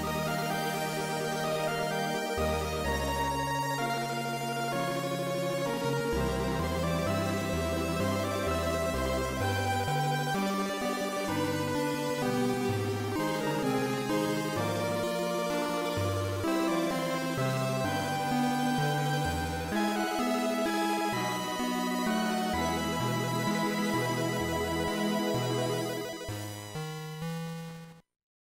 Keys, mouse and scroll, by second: 0.4 click, 3.7 right click, 5.4 KP_0, 8.7 right click, 10.8 click, 11.9 click, 23.8 click.